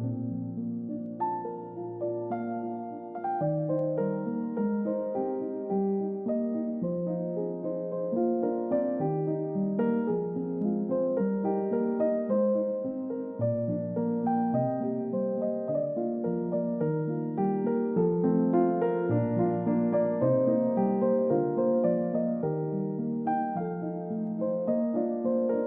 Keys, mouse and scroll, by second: 1.5 typing, 2.0 Return, 20.7 typing, 23.0 Return.